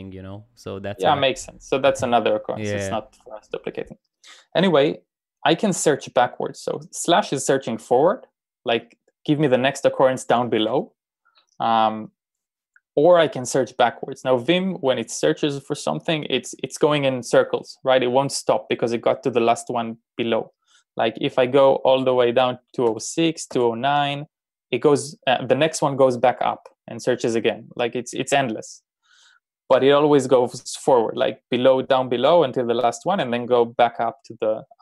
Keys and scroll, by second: 21.4 n, 22.8 n, 23.6 n.